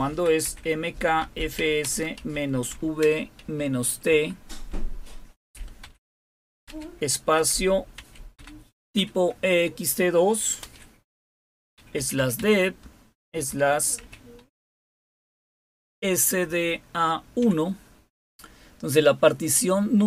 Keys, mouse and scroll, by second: 0.0-4.1 typing, 5.4-8.9 typing, 10.6-14.5 typing, 16.4-17.4 typing.